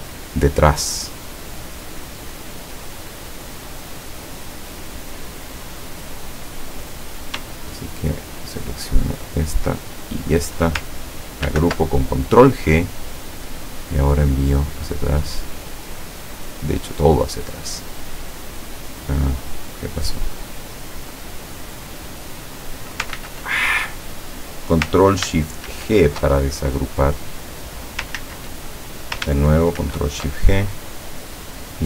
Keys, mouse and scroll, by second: 1.6 click, 3.8-4.6 drag, 5.3 click, 6.9 click, 8.1 shift+click, 9.1 shift+click, 10.1 shift+click, 11.6 ctrl+g, 14.5 click, 15.0 click, 16.4 click, 17.0 click, 18.5 click, 19.3 click, 21.1 click, 21.6 click, 22.2 click, 23.2 ctrl+z, 25.7 ctrl+shift+g, 26.5 ctrl+shift+click, 27.2 click, 28.2 ctrl+z, 29.9 ctrl+shift+g, 30.5 ctrl+shift+click, 31.6 click.